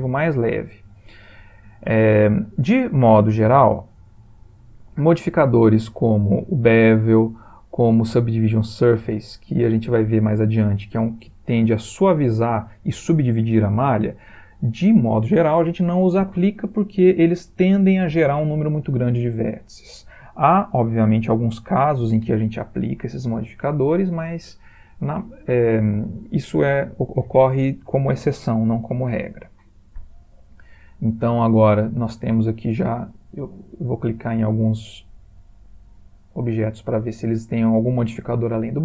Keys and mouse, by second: 7.1 click, 32.3 click, 34.3 click, 36.2 click.